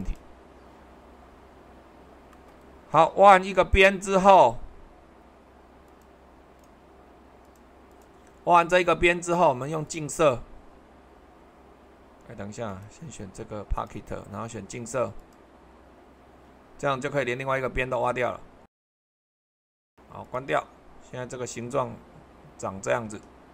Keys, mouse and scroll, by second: 0.0-1.1 drag, 1.9-4.0 middle drag, 5.9-9.0 drag, 16.8-21.4 middle drag, 21.5-23.5 middle drag.